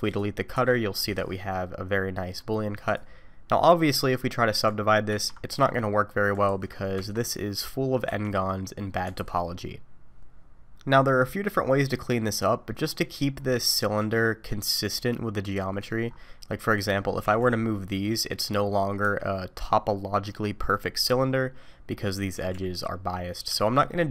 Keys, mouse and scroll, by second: 0.1 click, 0.5 Delete, 1.0 middle click, 2.9 click, 3.6-4.0 scroll up 2, 4.0 middle click, 5.2 ctrl+2, 5.9 middle click, 6.6 ctrl+z, 7.0 Tab, 7.3 middle click, 8.1 1, 8.8-9.2 scroll down 2, 9.2 alt+a, 10.9 middle click, 12.9-13.4 scroll up 1, 13.4-14.0 scroll down 1, 14.0-15.7 scroll down 1, 15.7 middle click, 16.1-16.5 scroll up 3, 16.7 click, 17.2 g, 19.3 middle click, 22.3 g, 23.8 middle click.